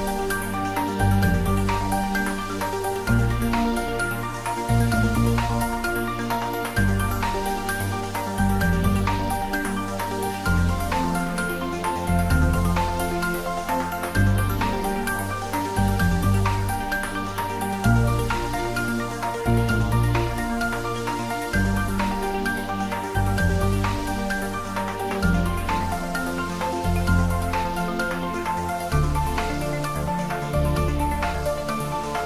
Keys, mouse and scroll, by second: 4.0 click, 7.2-8.1 scroll up 1, 10.6-11.3 typing, 10.6 scroll up 1, 19.9 click, 20.4 scroll down 1, 23.5-25.1 scroll down 1, 25.5-30.0 middle drag, 31.8 click.